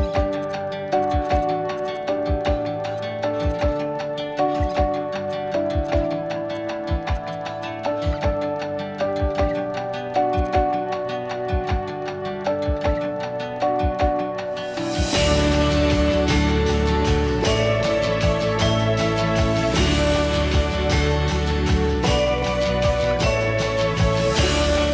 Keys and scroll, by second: 0.2 Delete, 1.2 Delete, 2.0 Delete, 3.8 Delete, 17.0 i, 22.4 m.